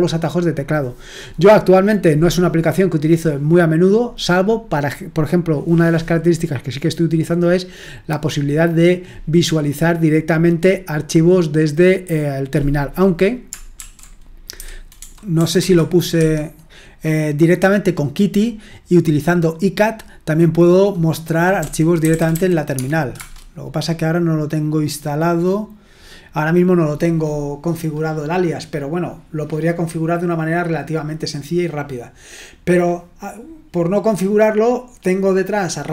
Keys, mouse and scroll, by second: 13.8-15.0 typing, 15.6 Escape, 16.1 Escape, 21.3-23.1 typing.